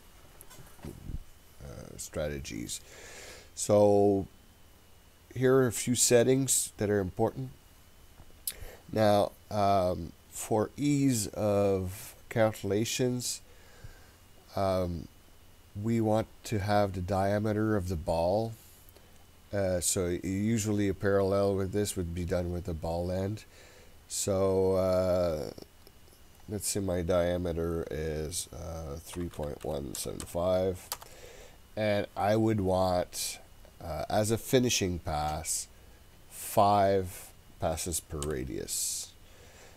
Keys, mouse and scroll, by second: 25.9-31.6 drag, 32.8-39.7 drag.